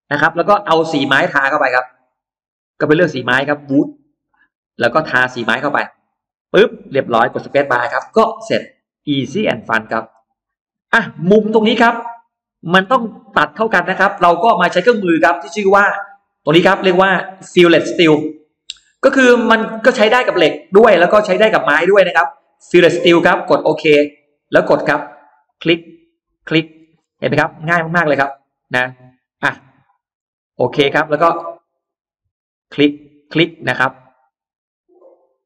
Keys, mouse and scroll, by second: 1.7 click, 3.0 click, 4.1 click, 5.3 click, 5.9 click, 7.8 space, 8.5 middle click, 8.7 space, 9.1 click, 9.5 middle click, 9.9-10.2 scroll down 2, 10.5-11.3 scroll up 4, 11.0 middle click, 11.4-11.7 scroll down 1, 11.9 scroll up 1, 15.2 click, 22.2 click, 24.2 click, 25.1 click, 26.0 click, 26.5-26.9 scroll down 1, 27.1-27.5 scroll up 2, 28.1 click, 28.7 middle click, 29.4-29.7 scroll down 2, 30.0 click, 30.9 click, 31.6 click, 32.4 click, 33.1 click, 34.3 click, 35.2 click.